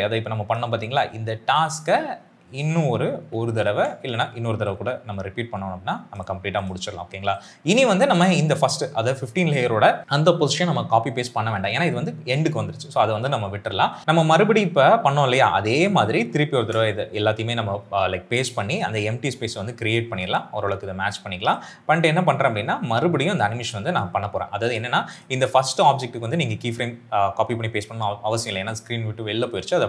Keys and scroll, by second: 3.1 ctrl+c, 3.5 ctrl+v, 15.7 ctrl+c, 16.5 ctrl+v.